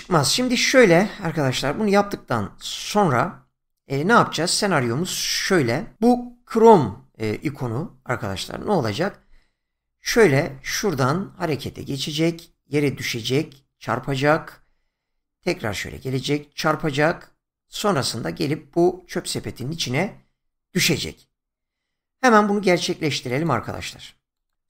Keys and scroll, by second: 10.0 <.